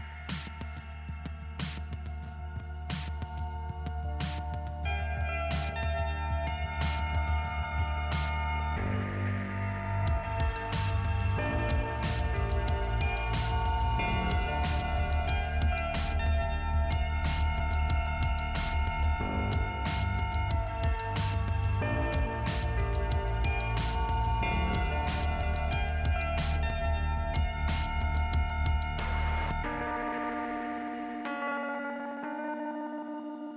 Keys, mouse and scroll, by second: 4.6 click, 5.0 click, 5.1 double click, 7.8 click, 9.5 click, 10.8-11.8 scroll down 4, 11.2 p, 11.4 p, 14.0 click, 15.7 scroll up 2, 18.9 click, 21.1 click, 25.2 click, 28.8 click, 30.8 click, 33.3 ,, 33.5 click.